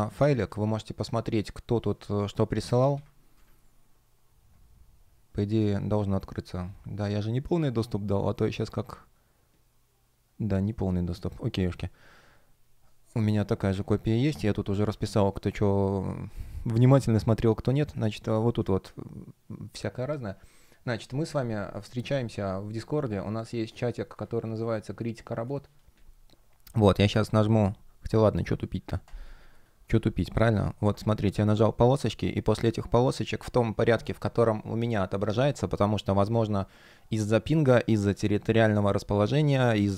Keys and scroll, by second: 2.8 super+m, 3.2 Return, 18.1 space.